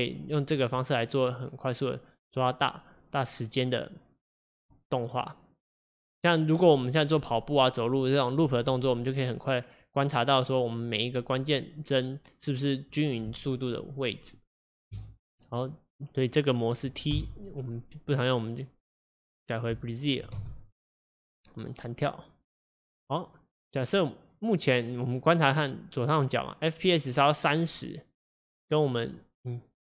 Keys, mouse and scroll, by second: 15.0 space, 19.8 t, 20.4 space, 29.2 click.